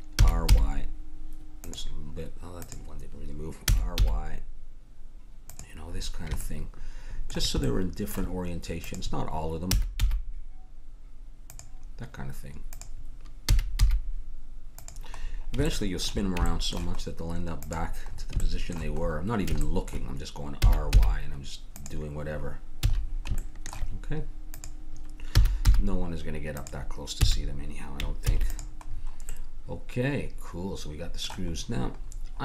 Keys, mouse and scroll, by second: 0.3 r, 2.6-4.8 drag, 3.7 r, 6.0-8.9 middle drag, 8.9-10.8 drag, 9.7 r, 12.7-14.5 drag, 13.5 r, 15.2-16.2 middle drag, 17.6-19.7 drag, 20.6 r, 21.5-23.0 middle drag, 22.8 a, 24.5-26.4 drag, 25.3 r, 27.2 a, 28.2 ctrl+s, 31.2 middle click.